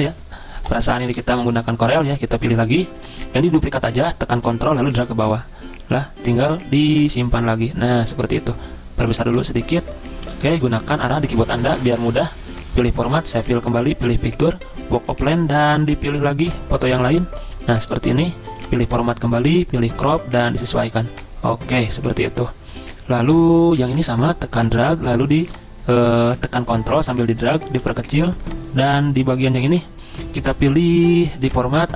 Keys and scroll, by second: 10.3 Left, 10.4 Left, 10.5 Left, 10.5 Left, 10.7 Down, 10.8 Down, 10.9 Down.